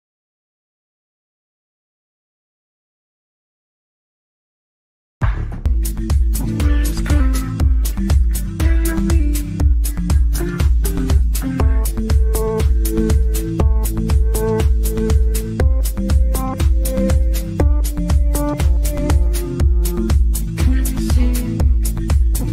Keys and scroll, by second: 4.0 g, 21.4 Delete.